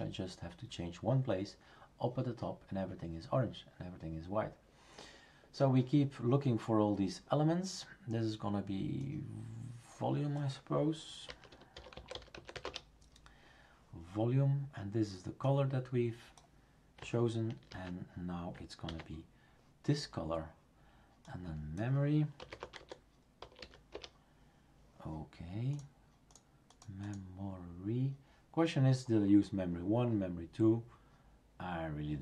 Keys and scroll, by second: 11.0-13.0 typing, 17.7 ctrl+v, 18.9 ctrl+s, 22.1-24.1 typing.